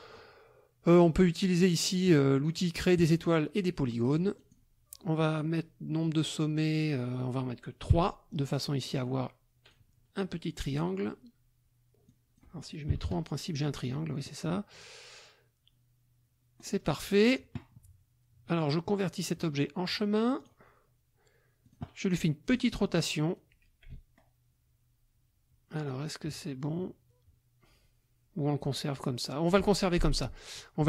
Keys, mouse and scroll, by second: 3.0 click, 4.4 click, 8.0 KP_3, 8.8-9.9 drag, 10.7 click, 12.1 click, 12.9 KP_3, 13.1 KP_Enter, 16.6 click, 19.2 click, 20.4 click, 21.6 click, 22.5 click, 23.3-29.7 drag, 30.4 click.